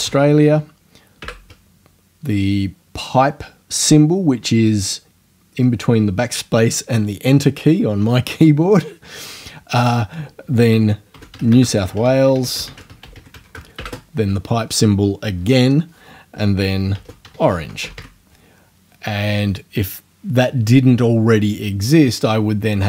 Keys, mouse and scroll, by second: 0.0-1.2 typing, 10.9-14.3 typing, 16.7-18.4 typing.